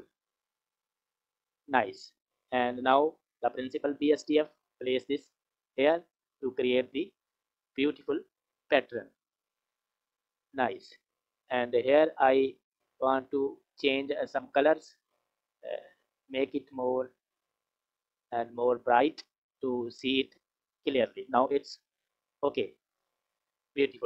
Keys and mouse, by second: 0.1-1.4 drag, 2.0 click, 3.0-5.2 drag, 12.6 click, 13.7 click, 14.5 click, 22.1 click.